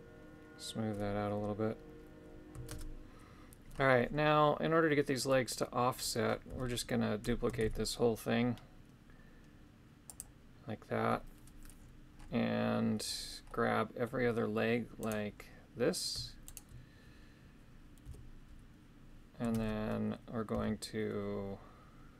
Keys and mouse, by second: 2.7 shift+space, 6.5 a, 7.6 shift+d, 10.1 click, 13.5 middle click, 15.0 right click, 16.5 shift+right click, 18.1 KP_3, 19.6 shift+space, 20.5 g.